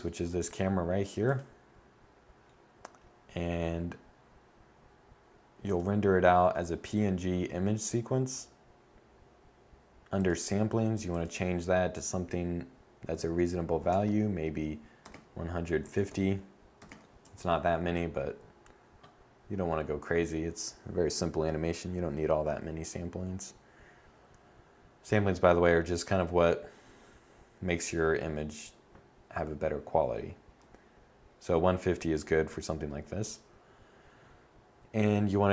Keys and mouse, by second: 0.8-4.5 drag, 5.1-17.4 drag, 35.3 click.